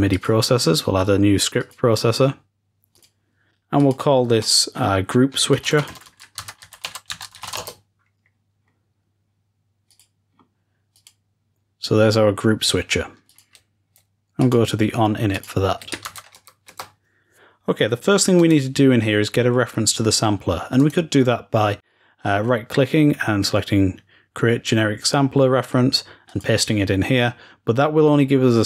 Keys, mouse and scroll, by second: 0.0 click, 1.5-2.3 drag, 2.9-6.1 drag, 9.8-16.1 drag, 16.0 ctrl+shift+s, 20.7 click, 21.2 right click, 26.1 click.